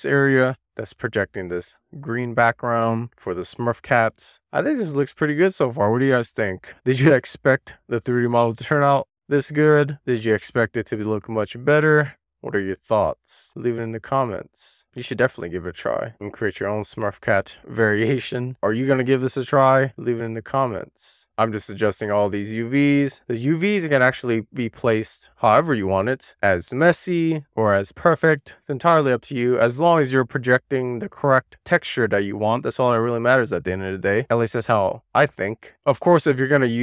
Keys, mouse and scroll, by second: 0.0-0.5 scroll down 1, 0.5 click, 0.6 super+z, 1.0 click, 1.4 scroll up 2, 1.6 super+z, 1.7 click, 1.8-2.3 scroll down 2, 2.3 super+z, 2.6-3.0 scroll up 1, 3.2-4.0 scroll down 1, 4.7 middle click, 5.0-5.5 scroll down 1, 5.5-5.9 scroll up 7, 5.9 click, 7.7 scroll down 2, 7.9 middle click, 8.1 scroll up 1, 8.2 click, 8.5 click, 9.1-10.8 middle drag, 10.9 middle click, 11.2 shift+middle click, 11.5 middle click, 11.8-12.4 scroll up 3, 12.4-12.8 scroll up 3, 12.8 shift+middle click, 12.9 click, 13.2 super+z, 13.3 scroll down 2, 13.5 click, 14.8-15.4 scroll down 3, 14.9 middle click, 15.2 shift+middle click, 15.6 scroll up 2, 15.9-16.5 scroll down 4, 16.0 shift+middle click, 16.2 shift+middle click, 16.7-17.0 scroll up 2, 17.0-17.5 scroll down 3, 17.5 middle click, 17.7 a, 17.9 scroll down 1, 18.1 scroll up 2, 18.2 shift+middle click, 18.5 scroll down 1, 18.6 click, 19.0 click, 19.3 click, 19.9 click, 21.3-21.8 scroll down 4, 21.8-22.3 scroll up 3, 21.9 shift+middle click, 22.3 middle click, 22.6 click, 22.9 shift+click, 23.7 middle click, 23.9 scroll up 3, 24.1 shift+click, 24.3 super+z, 24.8 middle click, 25.0 click, 25.6 middle click, 26.1 scroll up 2, 26.2 shift+middle click, 26.6 shift+middle click, 26.7 scroll down 1, 26.9 click, 27.2 shift+click, 28.3 scroll down 2, 28.6 scroll up 1, 28.8 scroll down 1, 28.9 shift+click, 29.1 click, 30.2 middle click, 30.3-30.7 scroll down 4, 30.7 shift+middle click, 30.9-31.4 scroll up 1, 31.4 scroll down 1, 31.6-32.0 scroll up 1, 32.0 shift+middle click, 32.1 drag, 32.7 shift+click, 33.5 super+z, 33.9 click, 34.2 super+z, 34.6 click, 34.8 super+z, 35.0 shift+click, 35.9 scroll down 1, 36.0 middle click, 36.4 click, 36.6 click.